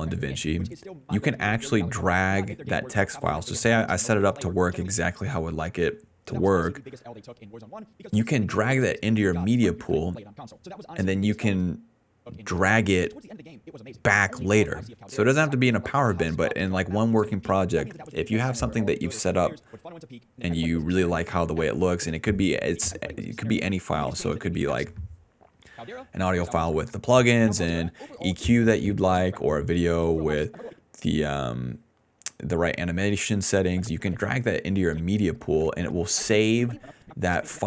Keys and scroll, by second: 4.8-6.2 typing, 7.5 s, 9.8 d, 11.3-15.9 typing, 22.1 space, 23.0 space, 24.8-30.4 typing.